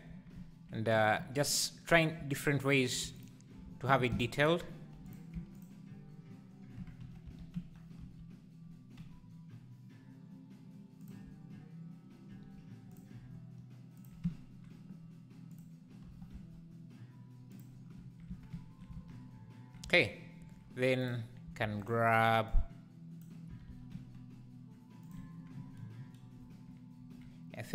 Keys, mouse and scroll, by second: 1.2 3, 1.4 click, 2.0 click, 2.4 alt+click, 3.2 alt+click, 3.9 shift+d, 5.1 p, 5.3 Tab, 5.5 click, 6.8 Tab, 7.2 s, 13.0 alt+e, 15.6 click, 16.1 g, 18.3 Tab, 19.0 alt+a, 19.8 Tab, 21.1 click, 21.6 shift+d, 22.5 click, 23.5 s.